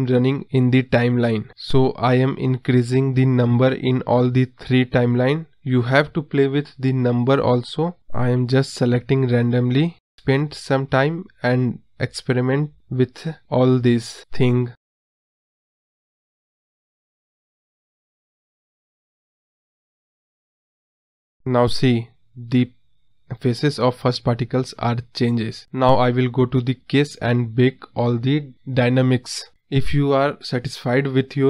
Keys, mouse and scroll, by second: 5.3 click, 9.8 space, 13.9-14.9 drag, 15.9-16.9 drag, 16.9 space, 28.6 space, 28.8 space, 30.3 space, 30.6 space, 30.8 space.